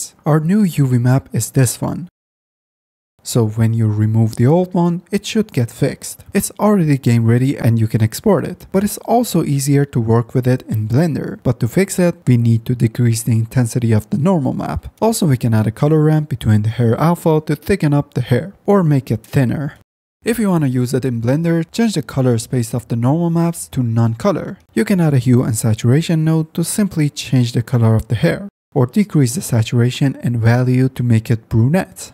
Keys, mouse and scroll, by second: 3.3 click, 7.9-8.3 middle drag, 9.2 middle click, 10.2-12.5 middle drag, 12.5-13.9 drag, 13.9-14.9 middle drag, 15.1 shift+a, 25.4 shift+a, 27.3-28.8 drag, 29.0 click, 29.4 click.